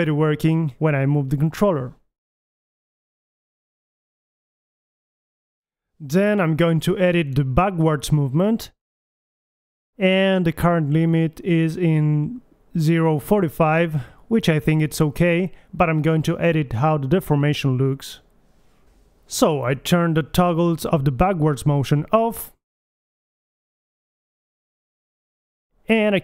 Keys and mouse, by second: 0.8-1.9 right drag, 2.3-4.8 drag, 5.0-6.5 middle drag, 6.5 alt+g, 7.8 KP_3, 8.3 click, 9.9 g, 10.5 g, 12.8 KP_3, 15.7 alt+g, 15.9 click, 16.9 g, 19.3 KP_1, 20.4 click, 20.5 g, 21.5-23.1 drag, 24.7 KP_1.